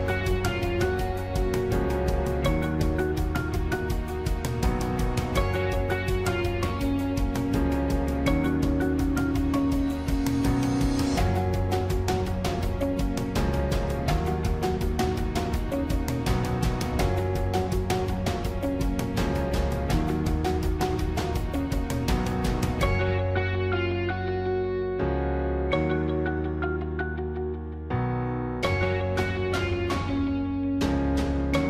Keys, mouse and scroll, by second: 5.4 ctrl+-, 5.7 ctrl++, 25.0 ctrl++.